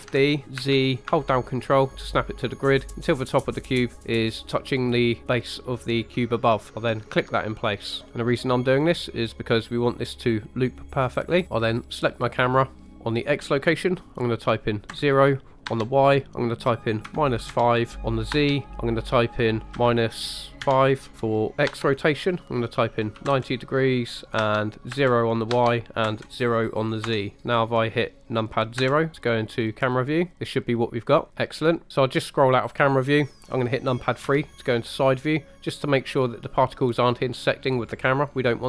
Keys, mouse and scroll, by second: 0.0 shift+d, 0.6 z, 7.0 ctrl+click, 11.8 click, 13.2-27.1 drag, 28.8 KP_0, 30.3-31.3 scroll down 3, 31.9 scroll up 2, 32.2 middle click, 33.0-34.3 scroll down 3, 34.3 KP_3.